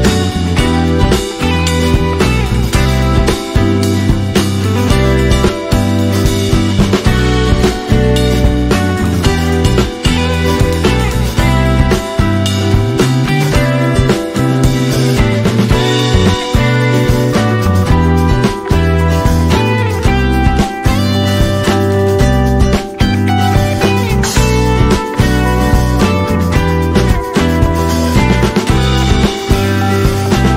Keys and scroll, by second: 5.2 shift+a, 7.4-9.0 typing, 10.8-12.8 typing, 14.1 typing, 20.1-21.0 typing, 24.1-25.0 typing, 26.0 s.